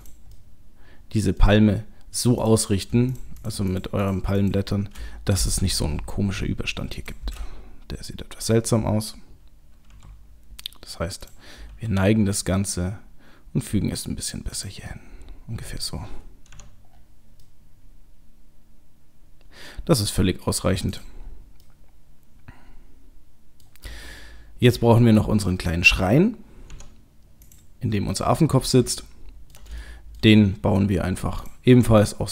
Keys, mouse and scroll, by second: 0.0 click, 0.3 middle click, 2.4 click, 3.1 shift+click, 3.4 shift+click, 5.7 g, 9.9 r, 11.7 g, 14.9 middle click, 16.5 Tab, 16.9-17.5 scroll down 4, 17.4 middle click, 20.9 click, 21.2-21.9 scroll down 3, 21.7 middle click, 23.6 middle click, 24.0 shift+middle click, 25.5 middle click, 25.9 middle click, 26.7 Tab, 27.4 click, 28.1 middle click, 28.7 middle click, 29.0 ctrl+middle click, 29.8 shift+middle click, 31.4 click.